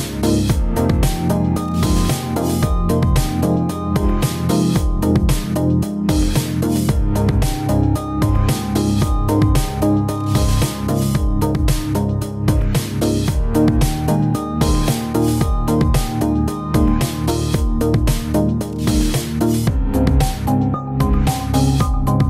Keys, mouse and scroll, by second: 0.2 g, 0.4 middle click, 0.7 middle click, 0.7 g, 0.9-1.5 scroll down 4, 1.0 middle click, 1.4 middle click, 2.5 shift+middle click, 2.7 shift+middle click, 2.7 middle click, 2.9 shift+middle click, 3.0 Tab, 3.1 click, 3.4 click, 4.8 Down, 5.3 click, 5.4 click, 5.8 Down, 6.1 click, 6.9 click, 7.2 click, 7.7 click, 7.8 click, 8.6 click, 8.8 click, 9.0 click, 9.5 click, 9.5-10.0 scroll down 3, 10.0 click, 10.2 click, 10.7 shift+middle click, 11.0 click, 11.2 shift+click, 11.4 click, 11.4 middle click, 11.5 Tab, 11.7 scroll up 2, 11.9 click, 12.0 middle click, 12.1 g, 12.8 middle click, 13.0 click, 13.1 g, 13.7 scroll down 1, 13.8 middle click, 13.9 shift+middle click, 14.0 middle click, 14.4 click, 14.8 click, 15.1 click, 15.1 scroll down 2, 15.1 middle click, 15.5 shift+middle click, 15.7 middle click, 16.0 click, 16.1 click, 16.3 Tab, 16.3 click, 16.6 Tab, 16.9 scroll up 2, 17.0 click, 17.2 ctrl+s, 17.4-17.7 scroll down 10, 17.4-19.8 typing, 17.7 scroll up 4, 17.9 shift+middle click, 18.1 middle click, 18.1 click, 18.6 click, 18.9 click, 19.1 click, 19.4 shift+middle click, 19.6 ctrl+z, 20.2 shift+middle click, 21.0 click, 21.2 shift+s, 21.4 click, 21.6 shift+s, 21.7 shift+middle click, 21.9 click, 22.0 shift+s, 22.2 click.